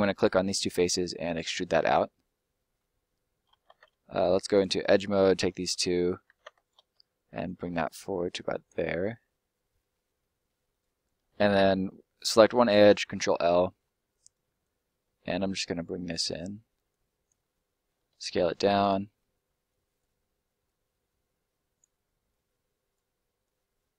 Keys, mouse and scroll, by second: 0.4 middle click, 0.8 e, 1.8 click, 3.5 ctrl+middle click, 4.5 click, 4.9 right click, 5.2 shift+right click, 6.1 ctrl+right click, 6.2 ctrl+z, 6.5 shift+right click, 7.5 click, 8.8 scroll down 1, 8.9 middle click, 10.1-10.7 scroll down 1, 10.7 right click, 11.3 ctrl+right click, 12.4 ctrl+right click, 12.7 ctrl+l, 13.4 middle click, 14.5 click, 16.8 click, 17.4 middle click, 18.1 s, 18.7 click, 19.0 middle click, 19.6 click.